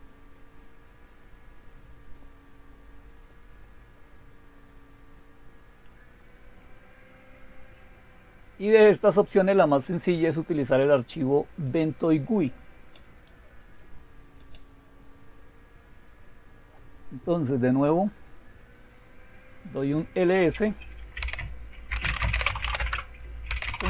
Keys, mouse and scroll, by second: 0.0-1.6 scroll down 1, 1.6-2.7 scroll down 1, 2.7-3.4 scroll down 1, 3.4 scroll down 1, 6.4-6.9 scroll down 1, 6.9-10.8 scroll down 1, 11.7-13.0 drag, 14.4 click, 15.1-16.2 scroll down 2, 17.2-18.8 scroll down 2, 18.8-19.3 scroll down 1, 21.2-23.8 typing.